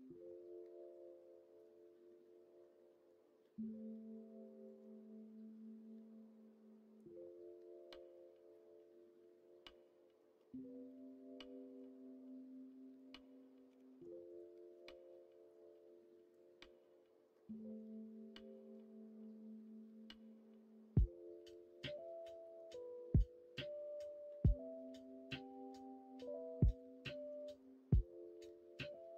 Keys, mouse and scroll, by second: 0.5-1.6 middle drag, 2.2 middle click, 8.1-10.2 middle drag, 11.7-12.9 middle drag, 13.6 2, 16.3 click, 16.8 middle click, 17.5 middle click, 18.3-21.0 middle drag, 22.3 middle click, 22.8-26.8 middle drag, 27.0 middle click, 28.0-29.1 middle drag.